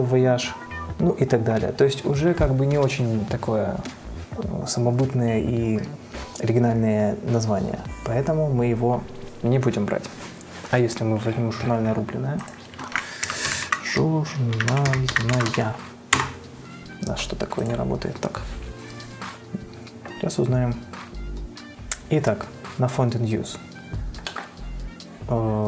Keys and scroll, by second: 12.9-16.2 typing, 16.4 Return.